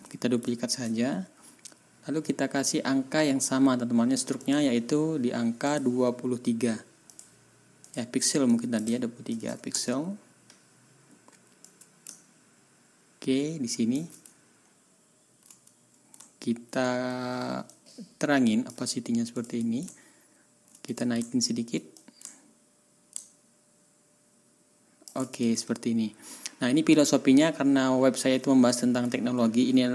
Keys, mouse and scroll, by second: 0.7 ctrl+d, 4.4 click, 5.6 click, 7.1 click, 7.8 middle click, 8.1-8.5 scroll up 1, 8.5 middle click, 9.2 KP_2, 9.4 KP_3, 9.7 Return, 11.6-14.1 middle drag, 14.1-14.8 ctrl+scroll up 3, 16.3 ctrl+scroll down 2, 17.7-18.8 middle drag, 18.8-19.4 scroll up 2, 19.4 middle click, 19.9 ctrl+scroll down 2, 20.3 scroll up 1, 20.9 click, 21.4 scroll up 1, 21.9-25.2 ctrl+middle drag, 25.3 ctrl+shift+middle click, 25.6-26.1 ctrl+shift+scroll down 3, 27.4 ctrl+scroll down 2, 29.2 ctrl+scroll up 2.